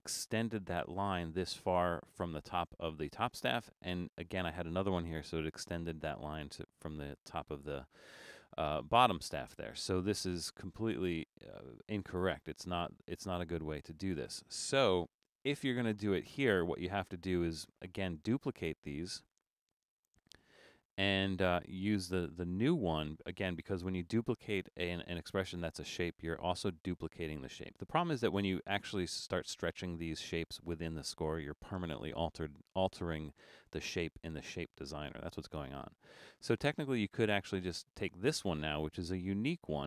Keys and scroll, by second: 10.8 super+z, 15.0 BackSpace.